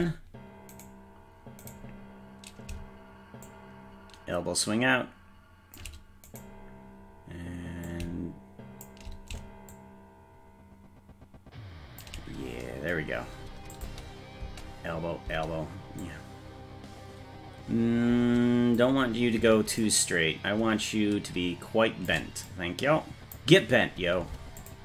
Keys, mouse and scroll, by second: 0.8-2.7 right drag, 3.5-5.8 shift+drag, 6.4 right click, 7.9-8.9 shift+drag, 9.7-12.1 shift+drag, 13.8 click, 14.4 space, 15.3 space, 16.1-18.8 drag, 19.8-22.1 shift+drag, 22.5 click, 24.6 click.